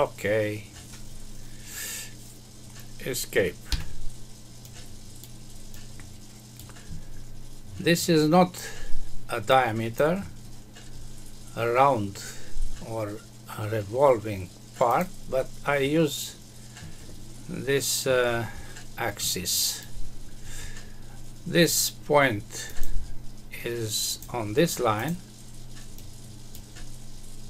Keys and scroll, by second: 3.7 Escape.